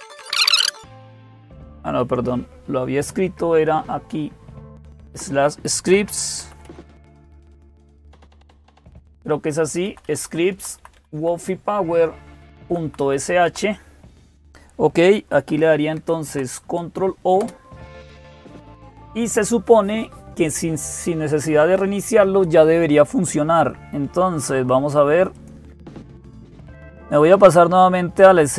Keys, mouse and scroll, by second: 0.0 ctrl+o, 0.1 Return, 3.3-4.7 Left, 4.9 Left, 5.5-7.7 typing, 7.8 Delete, 8.0 Delete, 8.2 Delete, 8.7 Delete, 9.7 Left, 9.9 Left, 10.0 Left, 10.4 Right, 10.6 Right, 10.7 Right, 10.9 Right, 12.3 Right, 12.6 Right, 12.8 Right, 13.0-13.8 typing, 15.7 ctrl+o, 17.2 Return, 25.1 click, 28.3 click.